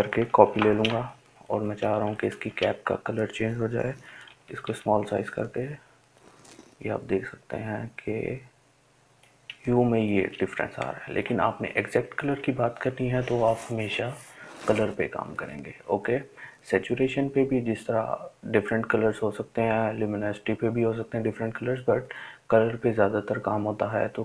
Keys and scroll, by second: 2.4 [, 2.6 [, 2.8 [, 3.0 [.